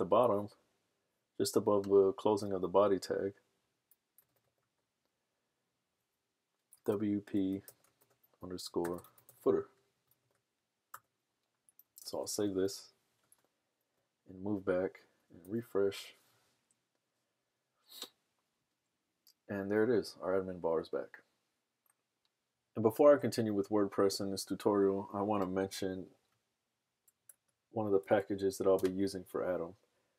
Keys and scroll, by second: 4.0-4.9 typing, 6.6-10.9 typing, 12.4 super+s, 13.5 super+Tab, 15.6 super+r, 27.5 super+Tab.